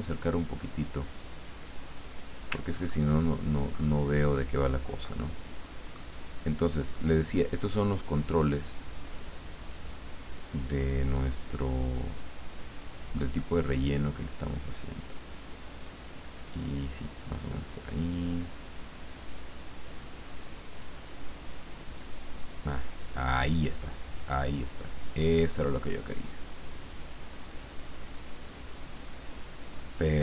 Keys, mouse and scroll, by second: 2.7-3.3 ctrl+scroll up 1, 3.7-4.1 ctrl+scroll up 1, 4.5 ctrl+scroll up 1, 5.0-6.3 ctrl+middle drag, 7.4-10.9 drag, 11.6-16.6 drag, 17.3-29.8 drag.